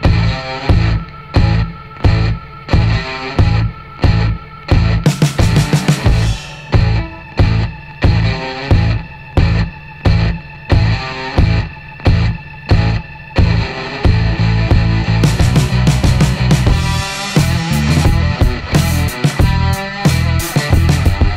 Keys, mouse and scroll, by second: 0.1 click, 1.8 click, 3.2 click, 4.4 click, 6.1 click, 7.6 click, 9.4 click, 11.6 click, 12.9 click, 14.5 click, 16.9 click, 20.0 click.